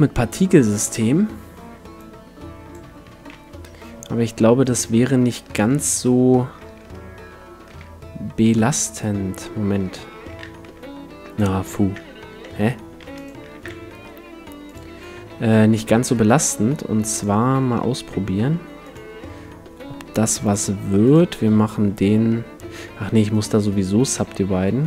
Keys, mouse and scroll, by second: 1.9-3.8 drag, 3.1 s, 4.8-6.7 drag, 5.6 ctrl+2, 7.3 Tab, 7.7 ctrl+r, 9.0-11.0 right drag, 10.1 ctrl+z, 10.6 ctrl+z, 11.9 shift+a, 12.5 Tab, 13.0 x, 13.5 shift+a, 16.0-18.0 drag, 17.5 s, 18.9-22.9 drag, 23.3-24.8 drag, 24.1 Tab, 24.5 w.